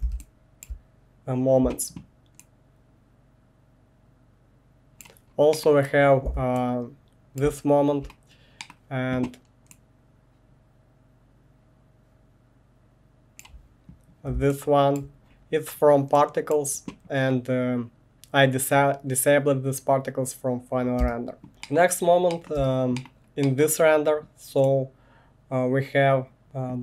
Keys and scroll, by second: 21.0 space, 21.5 1, 22.6 space.